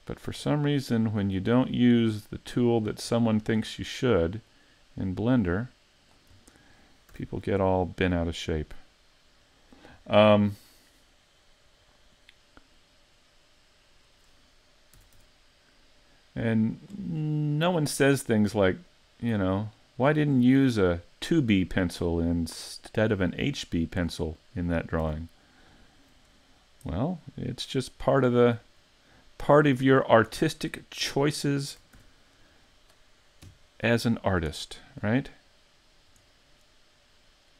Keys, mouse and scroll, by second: 0.5 middle click, 1.6 click, 3.1 middle click, 4.5 click, 6.4 scroll down 4, 7.1 a, 7.3-7.7 scroll down 2, 7.7 middle click, 10.7 scroll up 4, 12.8 middle click, 14.1 right click, 15.0 s, 17.2 middle click, 18.9 click, 20.6 middle click, 22.8 click, 24.4 middle click, 25.0 a, 25.2-26.0 scroll down 4, 25.7 middle click, 26.9-27.5 scroll up 4, 28.3 right click, 29.4 right click, 29.8 shift+middle click, 30.5 middle click, 32.0 shift+c, 32.3-32.8 scroll down 2, 32.6 scroll up 5, 33.4 KP_5, 34.1-35.2 scroll down 3, 34.6 shift+middle click, 35.2-35.5 scroll up 2, 35.9 scroll up 1, 36.3 shift+middle click, 37.2 middle click.